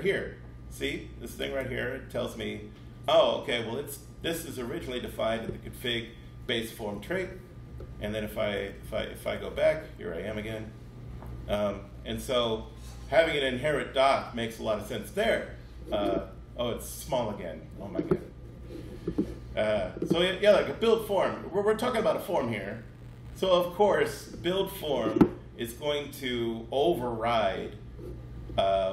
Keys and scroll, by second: 6.8 super+Left, 7.9 super+Left, 8.7 alt+super+Left.